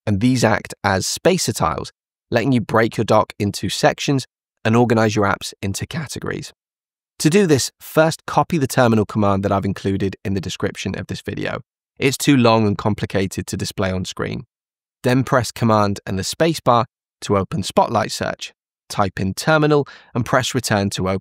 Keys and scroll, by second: 15.4 super+space.